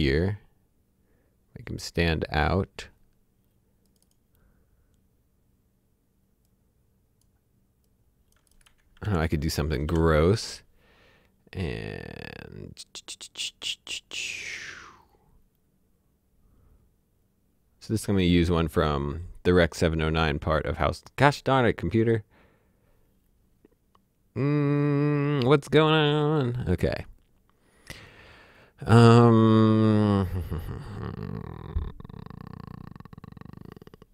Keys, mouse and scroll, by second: 6.4 click, 9.0 alt+s, 9.8 alt+l, 11.6 right click.